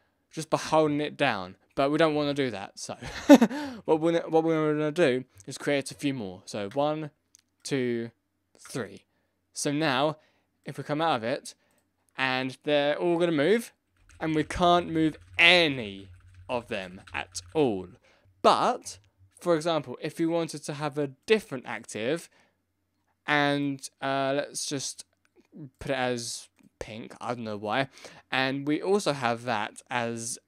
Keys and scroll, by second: 13.9 Up, 14.1 Left, 14.2 Down, 14.2 Right, 14.3 Left, 14.7 Down, 14.8 Right, 15.0 Down, 15.0 Right, 15.1 Left, 15.9 Right, 16.2 Left, 16.6 Down, 16.6 Right, 16.7 Left, 16.8 Up, 16.9 Right, 17.1 Left, 17.2 Up, 17.3 Right, 17.4 Down.